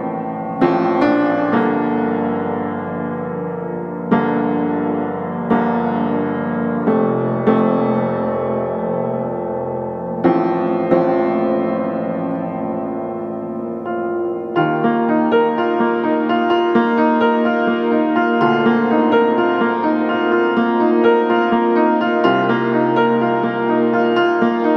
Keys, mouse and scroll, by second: 0.1 right click, 0.7-1.0 scroll up 1, 1.0 click, 1.5 scroll down 1, 1.6 scroll up 1, 1.8 click, 3.5-4.0 scroll up 1, 4.0 click, 4.8-5.3 scroll up 1, 5.3-5.7 scroll down 1, 5.7 click, 6.0 scroll down 1, 6.1 scroll up 1, 6.4-10.5 drag, 10.8 scroll up 1, 10.9 click, 13.8 click, 15.3 click, 16.4 click, 17.9 scroll down 1, 18.0-18.3 scroll up 1, 18.3-20.1 drag, 20.1 right click, 20.8-21.2 scroll up 1, 21.2 right click, 21.7-22.2 scroll up 1, 22.2 scroll down 1, 22.3 scroll up 1, 22.4 right click, 22.9 scroll up 1, 23.2 scroll down 1, 23.3 right click, 24.0 scroll up 1, 24.2 right click, 24.5 click, 24.6-24.7 scroll up 1.